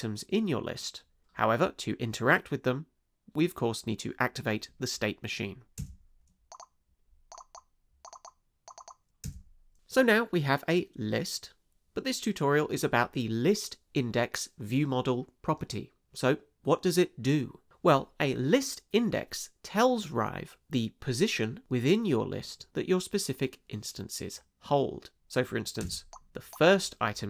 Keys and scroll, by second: 5.8 space, 9.2 space, 25.8 space.